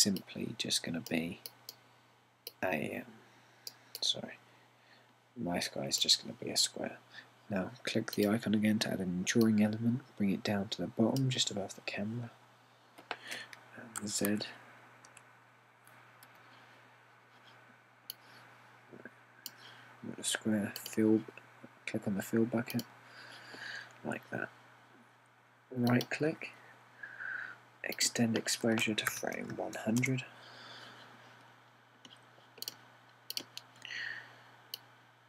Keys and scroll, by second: 15.1-16.1 typing, 17.3 typing, 29.9-31.0 typing.